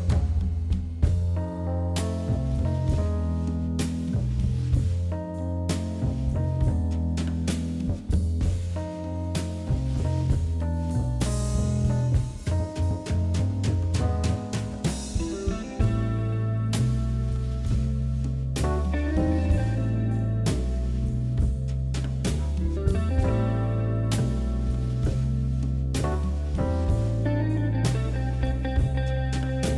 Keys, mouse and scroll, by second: 3.3 Tab, 3.8-4.2 scroll up 1, 4.2 click, 4.7 ctrl+KP_Add, 4.8 ctrl+KP_Add, 4.9 ctrl+KP_Add, 5.4-5.8 scroll down 3, 5.8 click, 6.3 click, 6.8 Tab, 8.7-9.1 scroll up 1, 9.1 shift+middle click, 9.8 Tab, 10.9 KP_1, 11.4 scroll up 3, 11.8 shift+z, 12.2 click, 13.1 shift+z, 13.2 scroll down 3, 13.7-15.8 scroll up 4, 16.2-17.7 drag, 19.9 click, 20.4 shift+z, 20.6-21.4 scroll down 4, 20.9 shift+z, 21.4 Tab, 21.7 click, 22.2-23.3 scroll up 8, 23.3 click, 23.5 Tab, 23.8 scroll down 8, 24.5-25.0 scroll up 8, 25.6 click, 26.1 ctrl+KP_Add, 27.0 middle click, 27.8 click, 28.4 shift+click, 28.7 shift+click, 28.9 shift+click, 29.2 middle click.